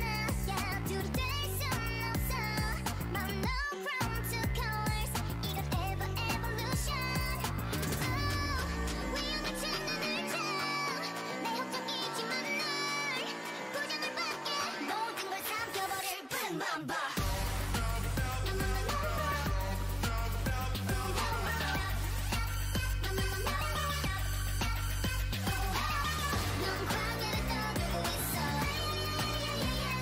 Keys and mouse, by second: 0.7 n, 1.0 t, 5.9-9.6 right drag, 6.7 f, 7.1 ctrl+r, 8.5 f, 9.6 f, 9.9-12.8 drag, 12.4 ctrl+z, 13.5 ctrl+Tab, 14.3-16.6 drag, 16.6 x, 18.6 x, 20.3 ctrl+Tab, 21.1-23.8 drag, 23.3 alt+m, 25.2 click, 25.9 ctrl+r, 27.4 alt+m, 28.3 a.